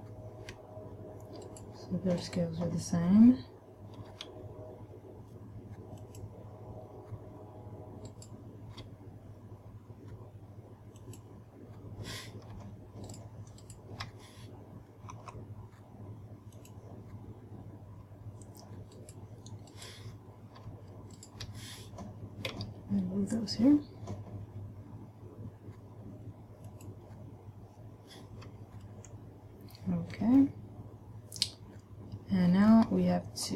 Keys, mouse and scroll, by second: 1.8 right click, 2.5 right click, 4.4 g, 6.5 click, 8.4 right click, 9.3 g, 11.5 click, 13.4 shift+right click, 14.1 shift+right click, 15.5 s, 17.1 click, 19.3 right click, 20.2 right click, 21.5 shift+right click, 23.0 g, 27.3 click, 30.8 shift+middle click, 33.4-33.5 scroll down 2.